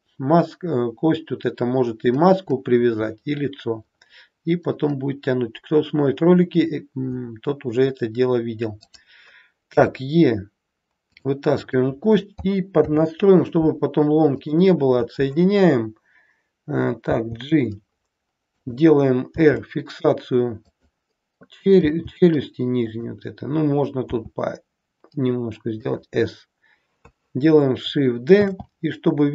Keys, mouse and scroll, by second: 3.8-5.2 scroll up 2, 5.2-5.8 scroll down 1, 6.8-8.8 scroll down 1, 8.8 click, 9.7 e, 11.5 click, 12.8 alt+p, 17.2 g, 19.5 r, 21.8 g, 24.1 s, 28.5 shift+d.